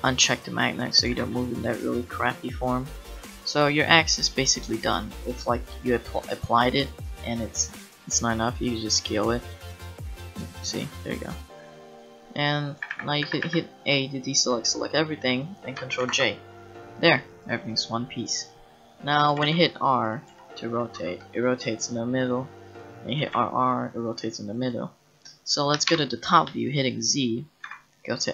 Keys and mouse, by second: 1.1 g, 4.2 click, 4.8-6.4 middle drag, 8.7-10.5 middle drag, 10.6-12.3 middle drag, 12.8 a, 12.9 a, 13.2 a, 13.4 a, 16.0 ctrl+j, 17.2 click, 19.3 r, 20.3 r, 23.2 r, 25.9 KP_7, 27.6 Tab.